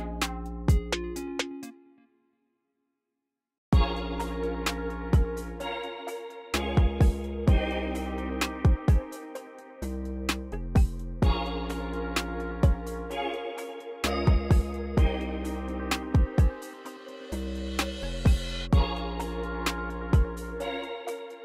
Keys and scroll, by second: 0.1 c, 1.1 space, 3.4-4.3 typing, 13.6-14.3 typing, 18.0 typing.